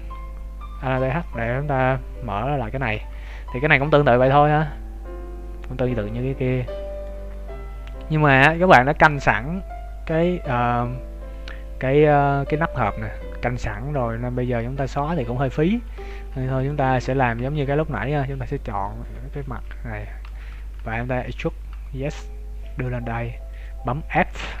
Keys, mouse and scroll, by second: 0.7 right click, 1.1 middle click, 2.9 z, 3.2 middle click, 3.9 scroll up 3, 4.6 middle click, 14.7 Tab, 15.4-15.9 scroll up 1, 15.9 ctrl+Tab, 16.8 z, 17.3 z, 17.6 middle click, 18.6 alt+right click, 19.4 KP_1, 20.2 z, 20.8 z, 21.1 e, 24.1 f, 24.3-24.6 scroll up 4.